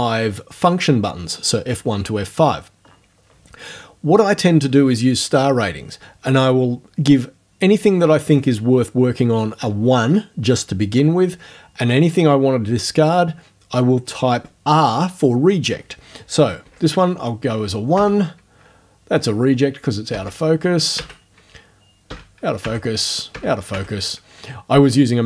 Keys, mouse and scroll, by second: 16.6 1, 18.0 Right, 20.1 r, 21.0 Right, 22.1 r, 22.6 Right, 23.3 r, 23.7 Right.